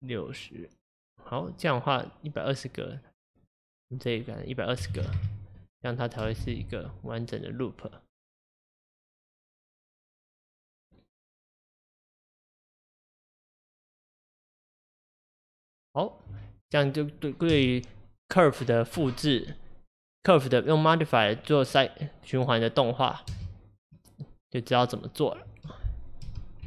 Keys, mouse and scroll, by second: 6.3 space, 17.6 space, 23.4 space, 26.4 space.